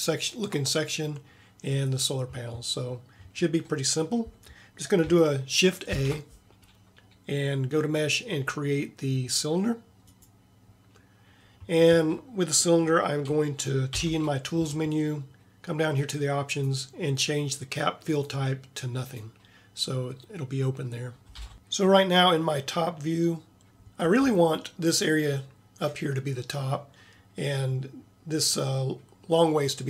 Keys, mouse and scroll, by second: 6.0 shift+a, 14.1 t, 16.0-16.8 drag, 21.4 t.